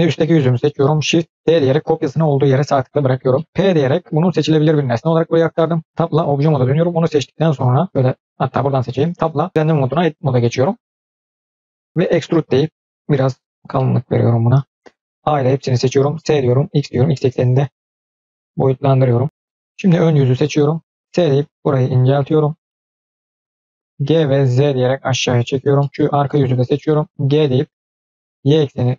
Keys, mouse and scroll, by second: 0.4 middle click, 1.3 shift+d, 3.2 middle click, 3.7 p, 5.8 Tab, 6.2-6.8 drag, 7.4 click, 7.7 click, 8.2 click, 9.1 Tab, 11.6 click, 12.0 e, 13.7 middle click, 15.2 a, 16.0 s, 18.2-19.8 middle drag, 20.1 scroll up 1, 20.4 click, 21.0 s, 22.6-23.7 middle drag, 22.6-23.7 scroll up 1, 23.7 scroll down 1, 24.0 g, 25.7 middle click, 25.9 scroll down 2, 26.1-27.1 drag, 27.2 g.